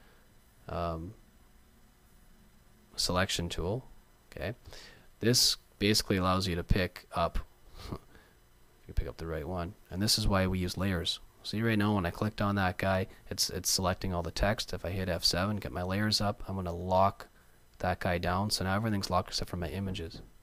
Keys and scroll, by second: 7.2 super+z, 15.0 F7.